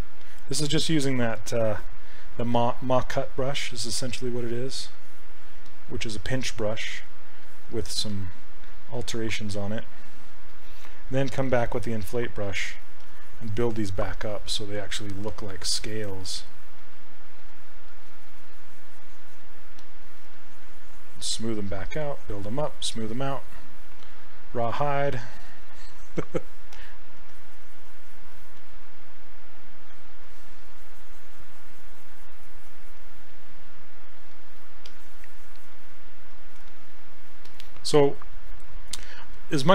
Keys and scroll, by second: 12.2 s.